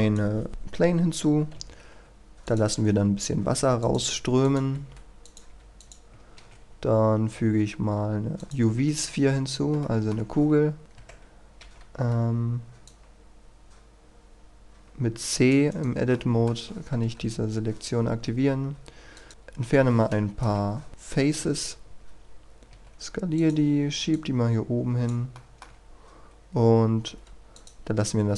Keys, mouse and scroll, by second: 1.5 a, 2.5 click, 4.1 a, 5.5 a, 8.4 click, 9.0-9.5 scroll up 1, 9.8 shift+middle click, 10.7-11.6 scroll up 2, 10.8 right click, 10.9 Tab, 12.1-12.9 scroll down 1, 12.9-15.7 drag, 15.7 right click, 16.1 middle click, 17.2 Delete, 19.1 click, 19.3-20.4 scroll down 1, 20.4 KP_1, 20.7 scroll down 1, 20.9 shift+middle click, 21.3 KP_3, 22.7 s, 23.3 click, 25.3 shift+middle click, 25.9-27.1 scroll up 1, 27.1 a, 27.5 click.